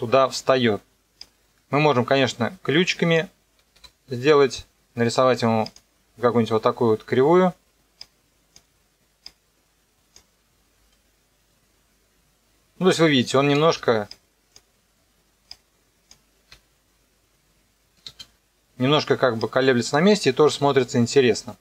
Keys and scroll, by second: 3.8 F9, 10.8 KP_0, 13.6 space, 16.5 KP_0, 18.0 space, 20.5 KP_0.